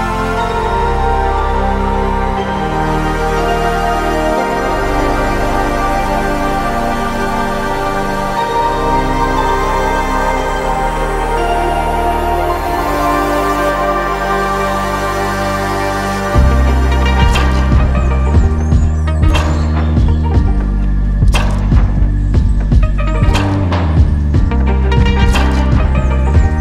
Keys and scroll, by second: 7.0 Escape, 7.9 F2, 12.5 Escape, 17.5 j, 21.6 j.